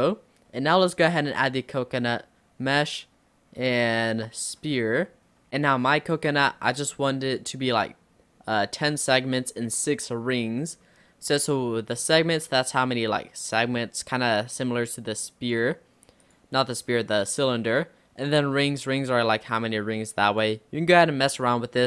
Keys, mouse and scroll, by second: 0.1-1.2 shift+middle drag, 1.2 shift+a, 5.0 scroll up 2, 5.5-6.5 middle drag, 6.5-7.1 scroll up 1, 7.1 scroll up 1, 7.3-10.3 drag, 10.5-10.9 scroll up 3, 10.9-12.5 middle drag, 12.5-15.7 drag, 16.4-21.8 drag.